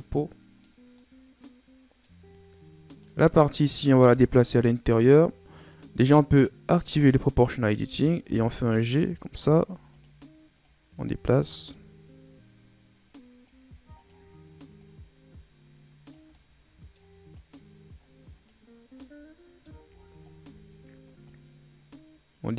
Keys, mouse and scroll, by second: 0.7 scroll down 1, 0.8-2.1 middle drag, 2.1-2.8 scroll up 1, 2.8 right click, 3.1-6.1 middle drag, 6.2 click, 7.5-8.1 scroll up 2, 8.1 g, 10.6 click, 13.9 right click, 14.7-16.2 drag, 16.2 scroll up 1, 16.2-17.3 middle drag, 17.3 right click, 18.9 scroll up 1, 18.9 middle click, 19.9-21.2 scroll down 10, 21.2 right click.